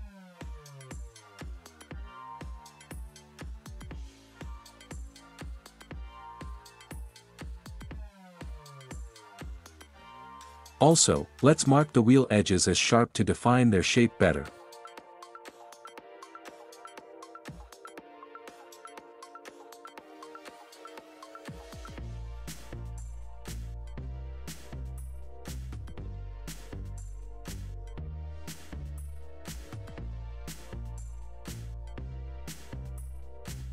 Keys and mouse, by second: 5.6-7.6 right drag, 10.3 middle click, 13.0 Tab, 16.9 alt+click, 24.6 alt+click, 26.4 alt+shift+click, 29.0 alt+shift+click, 30.5-33.4 drag.